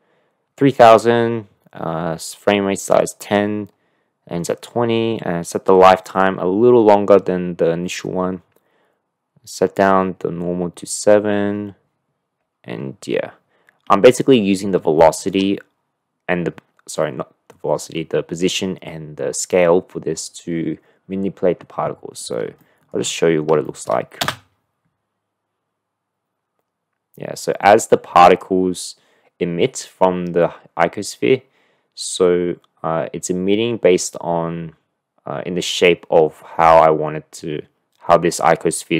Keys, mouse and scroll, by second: 14.9-15.3 shift+middle drag, 22.6 shift+middle click, 23.6 shift+click, 24.2 space.